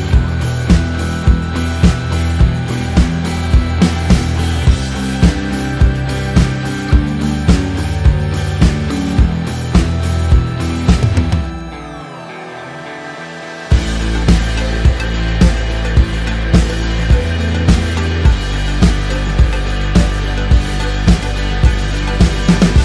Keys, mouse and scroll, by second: 2.3 click, 3.3 Up, 3.9 Up, 4.2 Down, 5.0 Down, 5.4 Up, 6.1 click, 6.4 shift+click, 7.4-11.3 typing, 8.0 click, 11.3 Return, 12.0 ctrl+[, 14.5 click, 15.1-17.7 typing, 17.9 KP_Enter, 19.6 click, 20.4 KP_2, 21.1 KP_Enter.